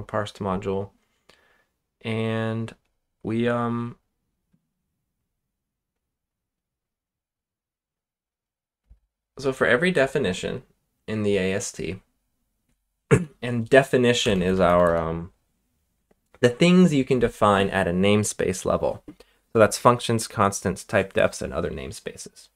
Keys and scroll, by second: 13.1 Return, 13.9-15.1 typing.